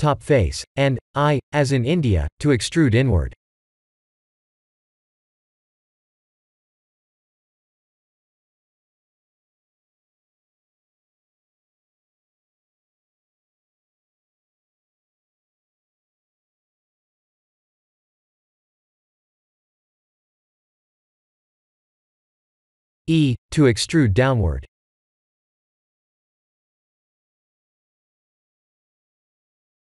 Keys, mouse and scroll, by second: 0.9 i, 2.4 Tab, 2.8 middle click, 3.7 middle click, 4.2 middle click, 4.4 click, 4.7 middle click, 4.8 middle click, 6.5 middle click, 7.1 KP_1, 9.2 click, 10.1 shift+d, 13.2 middle click, 13.3 middle click, 14.0 Tab, 14.3 scroll up 3, 16.5 i, 20.1 w, 21.5 click, 22.6 ctrl+z, 23.7 e, 26.5 shift+z, 26.9 KP_1, 28.0 g, 29.3 Tab, 29.8 middle click.